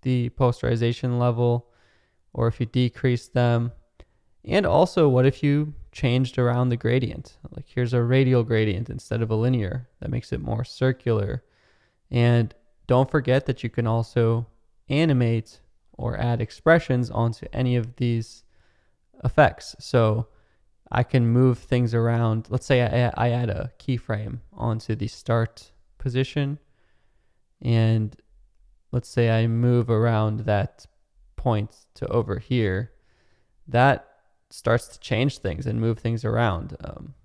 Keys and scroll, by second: 33.7 space.